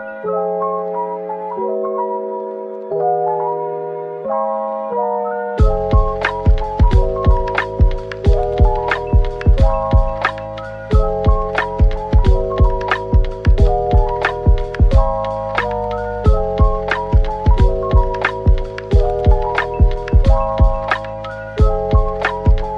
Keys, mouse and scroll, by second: 0.4 shift+click, 1.1-2.0 typing, 3.0 middle click, 7.3 Tab, 9.5-10.3 typing, 13.7 middle click, 14.1 Tab, 14.9 typing, 16.4-18.0 typing, 18.3 middle click, 19.0-19.9 typing, 21.2 middle click, 21.9-22.7 typing.